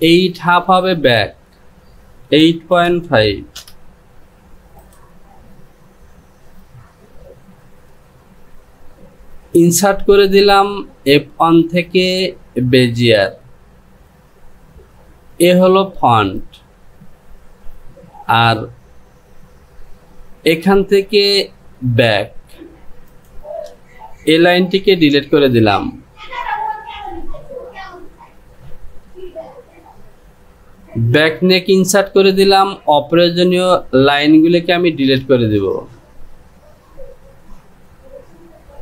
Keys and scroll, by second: 0.5 Down, 24.8 Delete.